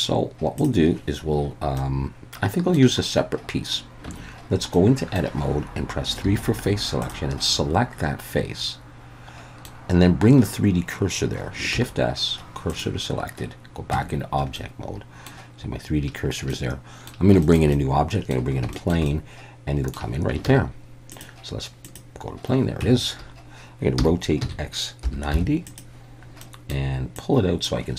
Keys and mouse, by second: 1.8-2.8 middle drag, 4.1 Tab, 4.7 middle click, 6.2 3, 7.0 click, 7.5-9.7 middle drag, 11.7 shift+s, 13.9 Tab, 14.6-15.3 middle drag, 16.5-17.1 middle drag, 17.4 shift+middle click, 17.7-18.3 middle drag, 18.7 shift+middle drag, 19.1 middle click, 20.5 shift+a, 22.8 Tab, 24.0 r, 24.4 x, 25.0 9, 25.3 0, 25.7 click, 26.4 middle click, 27.2 click.